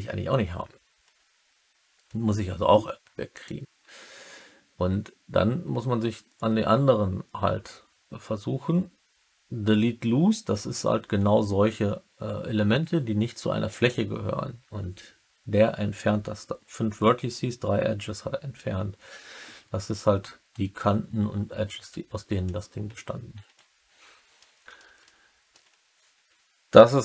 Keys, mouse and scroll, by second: 3.3-13.8 drag, 24.3 middle click, 25.0 alt+middle click, 25.3 alt+click.